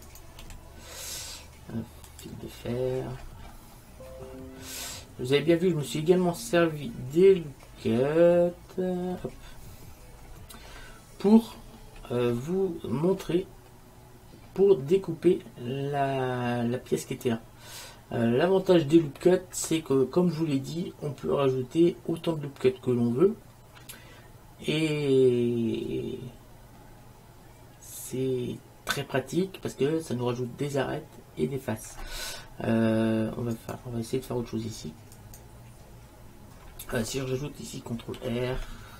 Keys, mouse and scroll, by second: 0.5 z, 2.8-5.1 middle drag, 10.8-15.5 middle drag, 33.6-37.2 right drag, 38.2 ctrl+r.